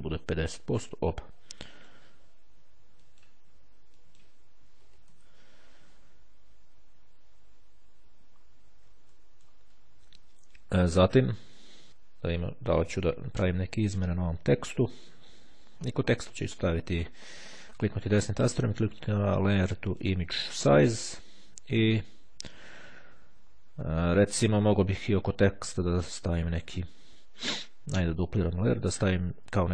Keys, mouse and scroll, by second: 1.9 click, 3.0 click, 3.9-4.8 drag, 4.9 KP_5, 5.0 KP_0, 5.2 KP_Enter, 7.9-8.9 ctrl+scroll up 2, 9.3 ctrl+middle click, 10.2-10.9 ctrl+scroll down 2, 11.1-11.7 ctrl+scroll down 2, 12.7-13.3 scroll down 2, 13.9 click, 16.3 right click, 19.8 click, 23.6-24.1 ctrl+scroll up 2, 26.6-27.1 ctrl+scroll down 2.